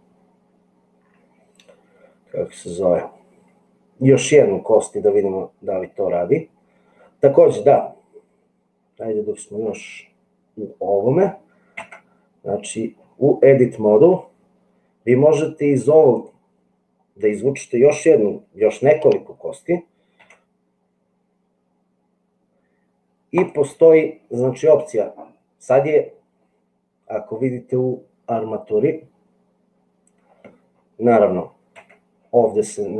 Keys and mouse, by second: 11.9 Tab, 20.2 e, 31.8 Tab.